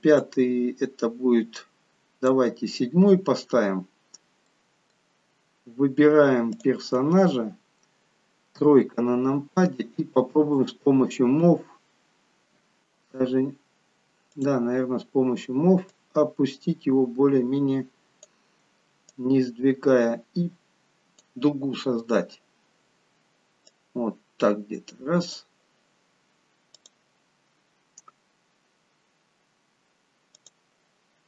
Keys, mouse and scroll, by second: 0.4 click, 3.4-4.1 scroll up 3, 4.1-4.5 scroll down 1, 4.5 middle click, 6.5 click, 8.5 KP_3, 10.6 click, 14.3 click, 15.9 click, 19.1 click, 22.1-22.6 scroll up 2, 24.0 click.